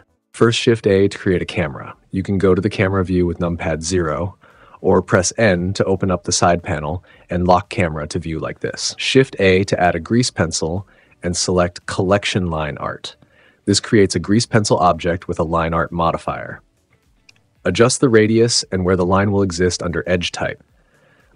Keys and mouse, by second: 0.3 shift+a, 3.5 -, 5.8 n, 6.1 click, 6.1 n, 6.4 click, 7.5 n, 8.5 shift+a, 16.8 middle click.